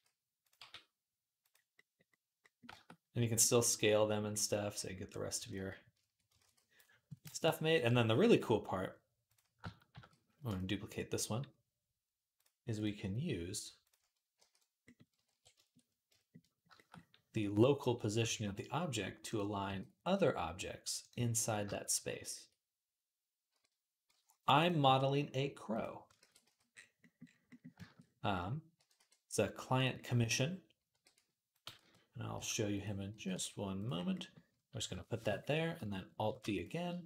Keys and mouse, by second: 0.4 g, 6.3 ctrl+s, 9.1 click, 9.2-12.1 shift+middle drag, 9.7 shift+d, 12.1 click, 12.2 middle click, 12.6 click, 12.7-21.5 middle drag, 14.2 alt+g, 15.1 alt+r, 18.0 r, 19.5 g, 21.5 shift+click, 21.6 middle click, 22.1 shift+click, 22.2-25.9 middle drag, 23.3 r, 24.6 s, 25.9 ctrl+click, 26.0 ctrl+a, 26.1-37.0 middle drag, 28.6 g, 30.7 r, 31.5 g, 32.9 g, 36.0 alt+d.